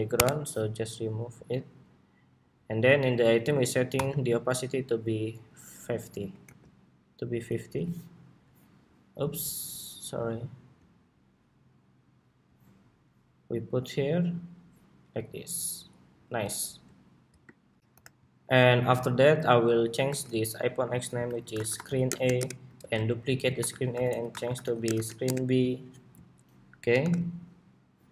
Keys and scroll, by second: 5.9 super+c, 6.1 super+v, 9.1 super+z, 16.3 super+s, 17.5 shift+super+2, 17.7 super+-, 19.7 super+r, 22.5 super+d, 23.4 super+r, 26.7 super+=.